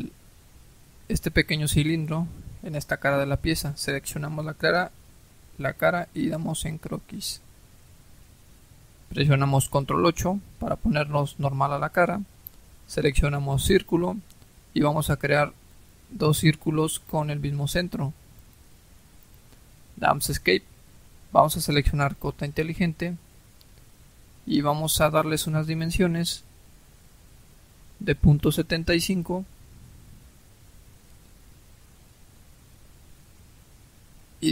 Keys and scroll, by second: 9.8 ctrl+8, 19.9 Escape, 28.7-29.7 typing, 30.9 Return.